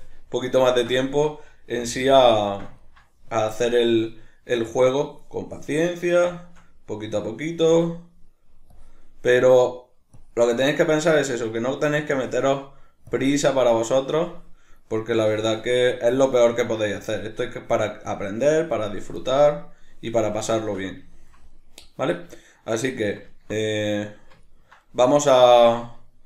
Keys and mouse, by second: 0.4-3.3 middle drag, 1.8 f, 2.2 click, 3.3-5.0 drag, 5.0-5.6 middle drag, 5.6-6.3 drag, 6.3-7.8 shift+middle drag, 7.8-10.8 drag, 10.8-12.2 middle drag, 12.2-13.6 drag, 13.6-17.0 middle drag, 17.0-17.6 drag, 17.6-18.1 middle drag, 18.1-19.2 drag, 19.2-26.2 middle drag.